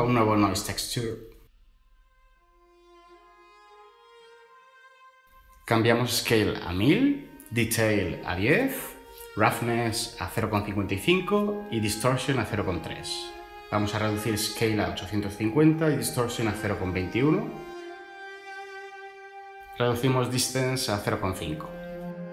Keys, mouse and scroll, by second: 2.0-2.5 typing, 2.7 Return, 5.5-6.0 typing, 6.4 Return, 8.0-11.1 typing, 8.6 Tab, 12.2 Return, 13.7-14.4 typing, 16.9-17.3 typing, 17.6 Return, 20.4-21.2 typing.